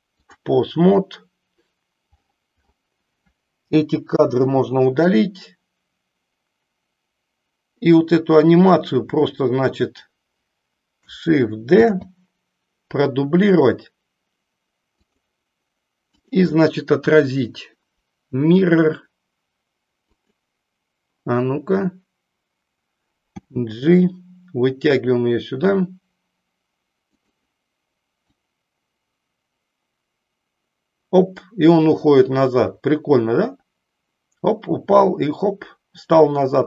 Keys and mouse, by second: 34.1 click.